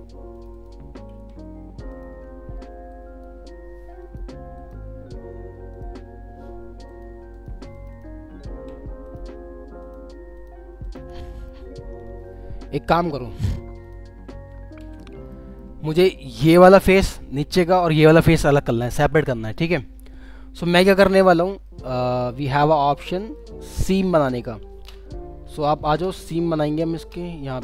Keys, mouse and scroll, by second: 1.1 ctrl+z, 1.9 ctrl+click, 6.9 ctrl+click, 8.5 ctrl+z, 9.0 ctrl+click, 11.3 middle click, 11.9 scroll up 1, 14.3 alt+w, 14.8 alt+w, 15.3 alt+middle click, 15.8-16.1 alt+scroll down 1, 16.9 scroll down 1, 17.3 alt+middle click, 20.0 scroll up 1, 21.0 alt+middle click, 22.3 middle click, 23.8-24.8 scroll up 1.